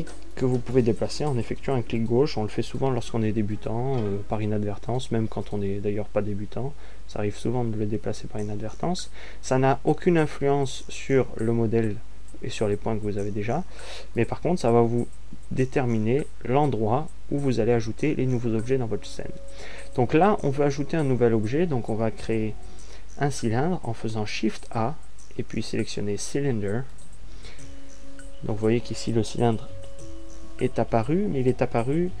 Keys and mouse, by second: 25.6 shift+a.